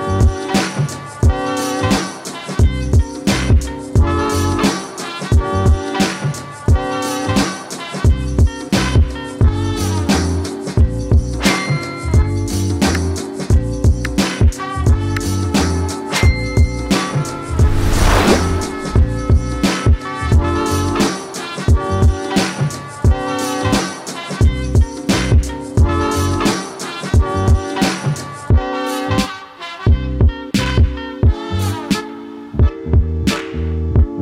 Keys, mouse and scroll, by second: 22.0-26.8 drag, 28.5-29.1 scroll up 1, 29.1-30.0 scroll down 1, 30.2-34.2 drag.